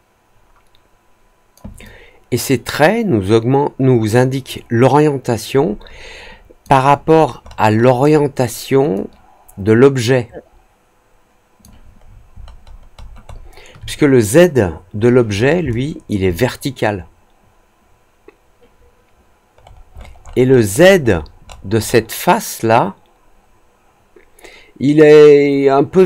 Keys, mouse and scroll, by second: 1.8-6.6 alt+drag, 7.0 alt+middle click, 7.3 alt+middle click, 7.7 alt+middle click, 8.0 alt+middle click, 8.9-11.5 alt+drag, 11.9-13.2 alt+scroll up 4, 13.2 alt+middle click, 15.6 alt+click, 19.5 middle click, 19.9 middle click, 20.1 middle click, 20.4 middle click, 20.7 middle click, 20.9 middle click, 21.1-21.9 scroll up 3.